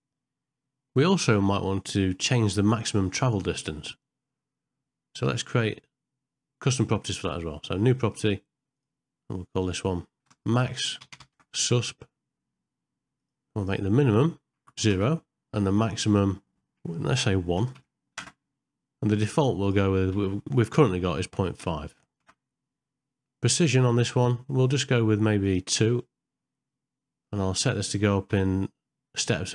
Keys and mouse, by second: 8.0 click, 8.7-29.5 drag.